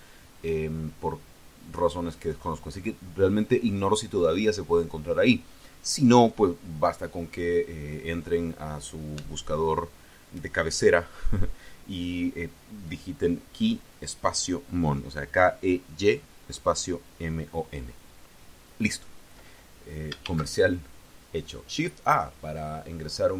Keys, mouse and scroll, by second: 20.1 shift+a.